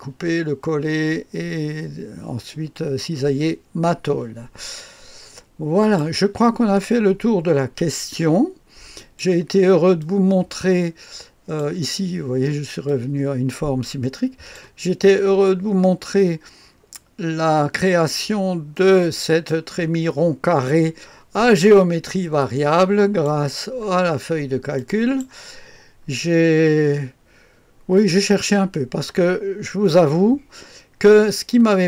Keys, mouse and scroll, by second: 5.8 click, 6.8-8.9 scroll down 1, 8.9 click, 10.0-11.9 drag, 12.9-15.0 drag, 15.2-16.7 scroll up 1, 16.7-17.4 scroll down 2, 17.4-18.8 middle drag, 18.8-20.2 right drag, 22.4-23.7 drag, 24.7 click, 25.9-26.7 scroll down 2, 26.7-28.7 middle drag, 28.7-31.8 scroll up 2.